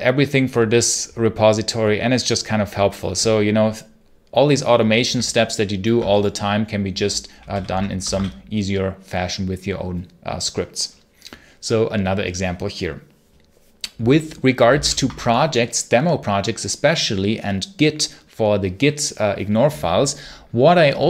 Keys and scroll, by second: 7.4 ctrl+l, 7.9 Escape, 8.0 k, 14.6 ctrl+c, 14.7 ctrl+l.